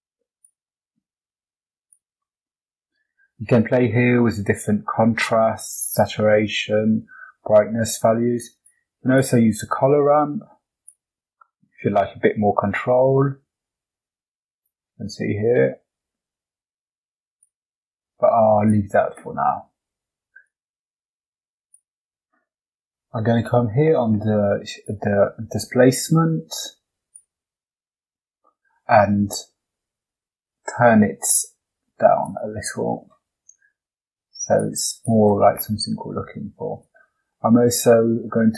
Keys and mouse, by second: 1.7 click, 8.5 click, 9.1-11.0 drag, 11.8-14.6 drag, 15.5-17.4 drag, 18.6-20.4 drag, 21.6 click, 24.6 click, 26.2 click, 28.9-32.6 drag, 34.4 click, 34.8 click.